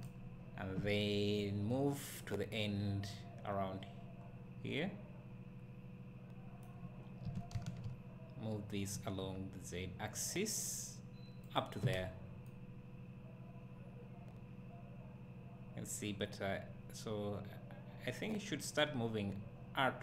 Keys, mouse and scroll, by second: 1.4-11.5 right drag, 11.5 click, 12.5-20.0 right drag.